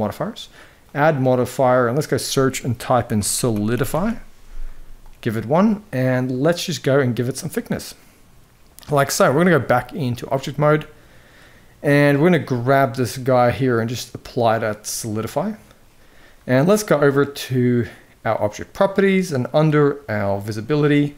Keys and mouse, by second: 0.7-4.8 drag, 6.1-8.4 drag, 9.3-9.9 drag, 10.4-11.6 middle drag, 13.2-15.2 drag, 20.1 click.